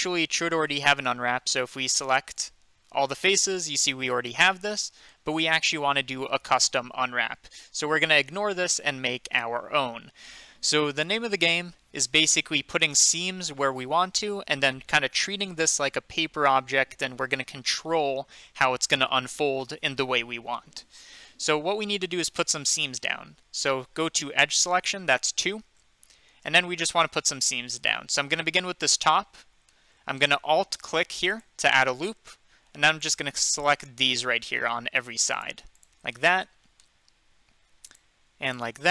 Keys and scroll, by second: 2.9 a, 25.4 2.